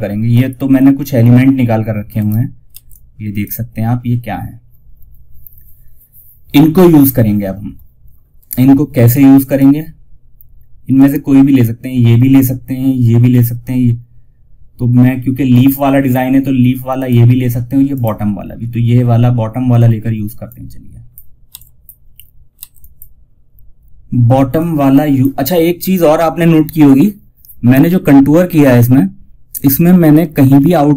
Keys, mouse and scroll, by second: 1.5 right click, 2.0 F2, 2.2-8.8 drag, 16.3 click, 17.7 scroll down 1, 19.7 click, 20.8 F2, 20.8 click, 21.8 F2, 22.0-27.9 drag, 27.9 scroll down 1, 29.8 scroll down 1.